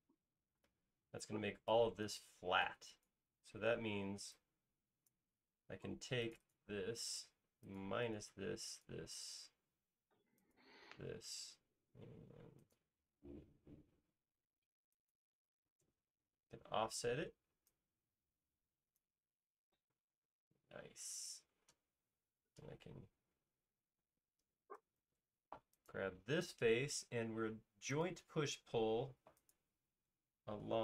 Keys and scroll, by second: 1.2 space, 2.4 e, 4.2 typing, 6.4 space, 17.2 f, 19.7-20.5 typing, 22.6 p, 24.1 space, 25.0 super+s.